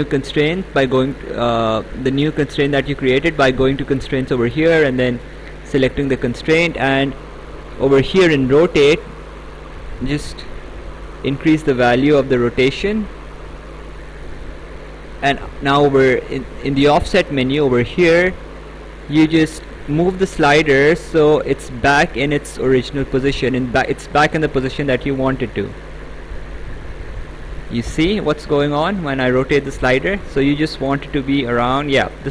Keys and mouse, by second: 1.1 click, 5.2 click, 9.0 click, 19.2 click.